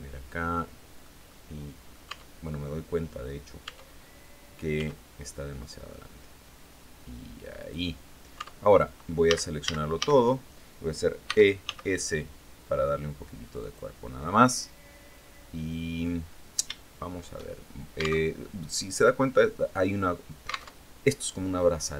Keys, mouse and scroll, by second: 0.7 right click, 1.5 Tab, 3.1 Tab, 4.2 s, 7.0 click, 7.8 Tab, 8.7 a, 10.7 e, 11.1 s, 13.0 click, 13.8-15.7 drag, 15.7 scroll up 1, 16.2 shift+click, 17.7 alt+Tab, 20.2 alt+Tab.